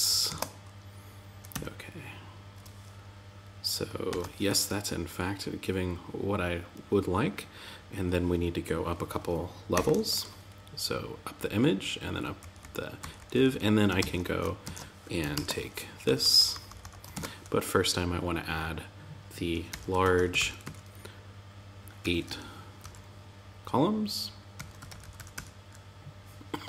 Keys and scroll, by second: 0.9 Tab, 3.4 super+z, 9.2 shift+^, 11.7 Down, 13.3 super+Left, 14.0 shift+super+Right, 14.7 super+c, 15.4 Up, 16.5 super+Right, 26.1 shift+>, 26.4 Tab.